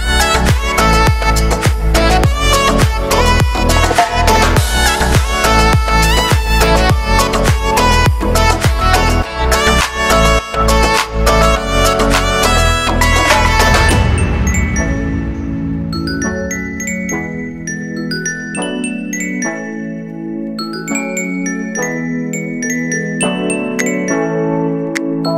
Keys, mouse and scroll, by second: 0.0 scroll up 1, 0.2 e, 2.2 scroll down 4, 2.3-4.3 shift+middle drag, 4.3 ctrl+KP_Add, 4.6 ctrl+KP_Add, 5.3 shift+d, 6.3 shift+middle click, 6.7-7.0 scroll up 5, 7.6-8.7 drag, 8.7 g, 9.2 middle click, 9.9 right click, 10.5 middle click, 10.7 scroll up 1, 11.0 g, 14.0 scroll down 3, 14.2 middle click, 14.4-15.0 scroll up 3, 14.6 shift+middle click, 15.0 ctrl+r, 17.9 click, 18.7 right click, 19.3 middle click, 19.5 e, 21.0 scroll down 1, 21.2 shift+middle click, 21.6 scroll down 1, 21.7-24.5 shift+middle drag, 24.5-25.3 drag.